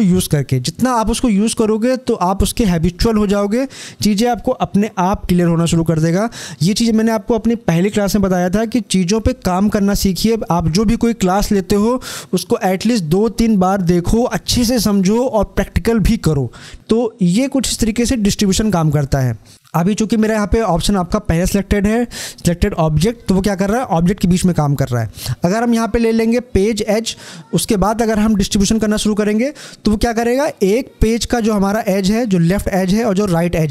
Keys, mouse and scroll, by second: 26.7 click, 29.4 click.